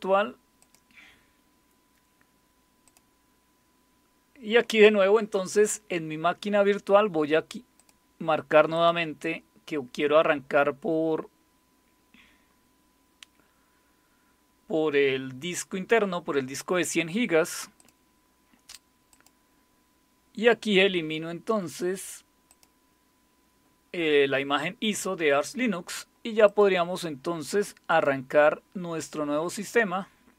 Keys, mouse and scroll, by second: 0.6 click, 2.8 click, 7.8 click, 8.7 click, 17.8 click, 19.1 click, 22.5 click, 26.4 click, 27.9 click.